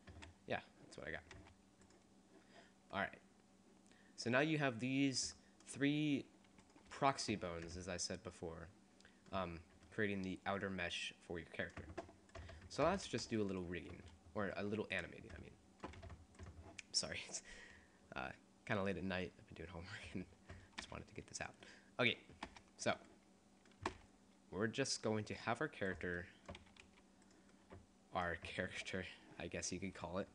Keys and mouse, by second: 1.6 r, 3.1-4.4 middle drag, 6.8 middle click, 7.0 g, 7.2 right click, 12.3-13.5 right drag, 13.3 g, 14.7 g, 15.1 click, 16.1 g, 20.3 click, 20.9 r, 22.5 r, 22.9-24.9 drag, 23.9 r, 26.3 click, 26.7 r.